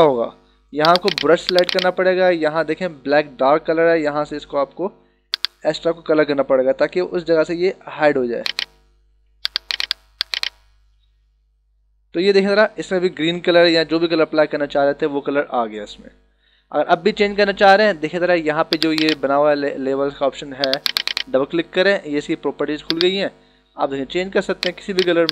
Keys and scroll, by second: 9.4 h, 10.9 b, 12.3 -, 13.2 ctrl+-, 15.9 ctrl+=.